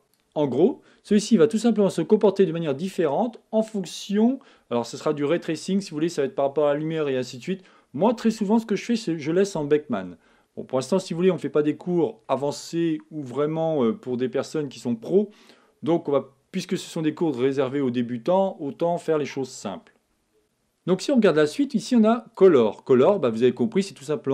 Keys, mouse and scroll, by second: 0.0-1.7 drag, 11.2-13.1 middle drag, 13.2-20.4 middle drag, 22.5-24.1 middle drag.